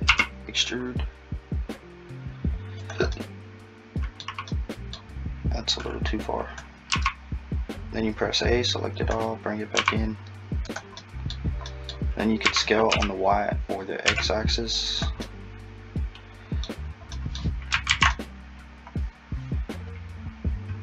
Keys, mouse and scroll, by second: 0.1 e, 3.2 middle click, 5.8 click, 6.9 a, 8.4 click, 9.8 s, 11.0 middle click, 12.5 s, 15.3 middle click, 17.1 middle click, 17.9 alt+z, 18.1 middle click.